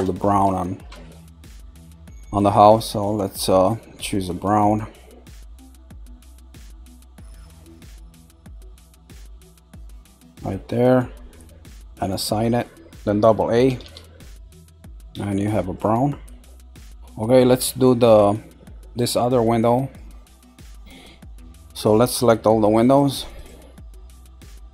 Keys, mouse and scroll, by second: 3.0 click, 11.8 click, 13.6 a, 14.4-14.9 scroll down 1, 14.9-15.9 middle drag, 15.9 scroll up 3, 16.9-22.0 shift+middle drag, 22.0 click, 22.9 shift+click, 23.3 shift+click, 23.9 shift+click, 24.6 shift+click.